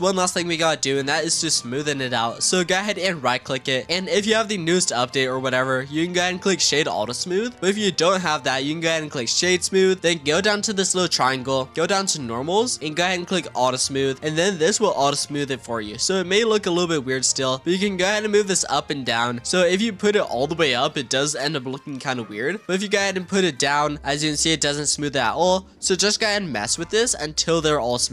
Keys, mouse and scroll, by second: 2.2 click, 2.9-5.6 right drag, 11.0 click, 12.2-13.5 drag, 14.3-17.9 middle drag, 17.9-20.8 drag, 24.8-25.4 scroll up 3, 25.4-26.1 scroll down 3, 27.5-28.1 scroll up 3.